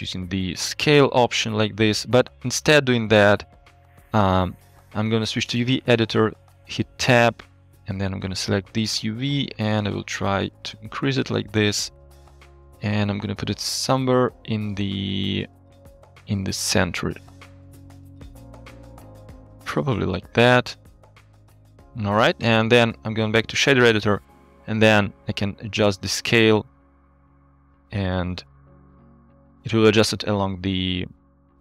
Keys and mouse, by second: 0.3-1.3 drag, 2.5 ctrl+z, 4.3-5.6 drag, 6.4 Tab, 8.0 click, 9.0 s, 12.5 KP_1, 13.4 s, 15.0 s, 16.3 g, 20.2 Tab, 22.8 click, 25.7-28.6 drag, 28.6 middle click, 28.8-29.9 drag, 30.1-30.4 middle drag.